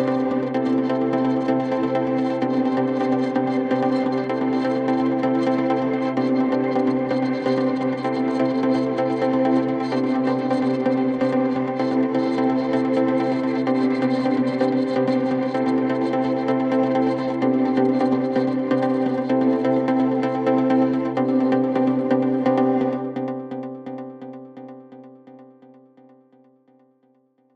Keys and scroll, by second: 7.3 shift+Home, 7.8-17.5 typing, 19.1-27.5 typing, 24.5 Return.